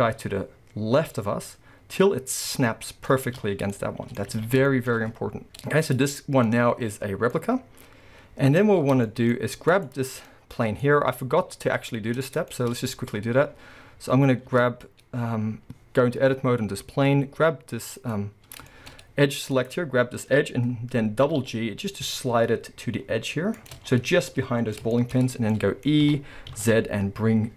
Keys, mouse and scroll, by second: 3.7-4.3 middle drag, 4.3 scroll up 2, 4.5-9.7 shift+middle drag, 4.5 a, 6.5-7.3 scroll up 2, 9.0-9.4 scroll up 2, 9.7 click, 10.3-18.0 middle drag, 10.9-11.2 scroll up 2, 14.5 Tab, 18.0 click, 18.7 shift+middle click, 18.9-19.2 scroll up 1, 19.6 click, 21.3 g, 23.7-25.3 middle drag, 23.7 shift+click, 23.9-24.3 scroll up 2, 25.3 scroll, 25.5-27.5 middle drag, 26.1 e.